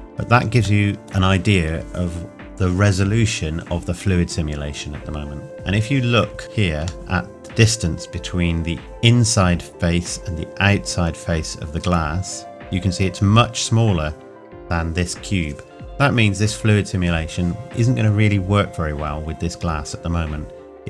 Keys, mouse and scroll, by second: 0.9 middle click, 6.2 scroll up 1, 6.9 shift+middle click, 12.8-13.4 scroll down 1, 19.6-20.8 scroll up 1.